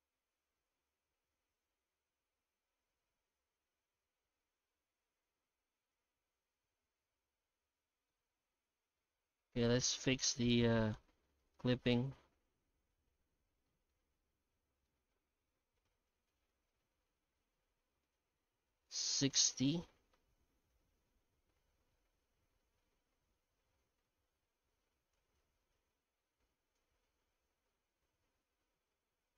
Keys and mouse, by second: 8.3 middle click, 9.7 F9, 13.7 middle click, 14.5 middle click, 15.4 F9.